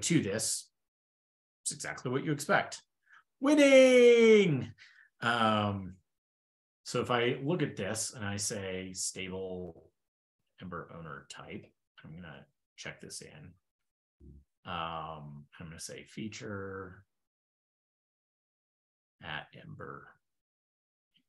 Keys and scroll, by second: 5.9 ctrl+super+Return, 20.4 ctrl+b.